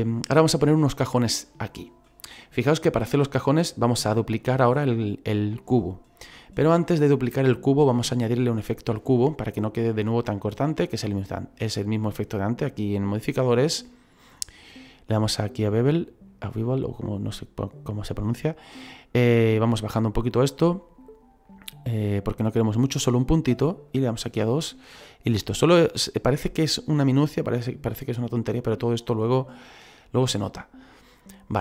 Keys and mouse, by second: 13.5 click, 15.7 click, 19.0 click, 22.9 click, 24.7 middle click, 30.8 middle click.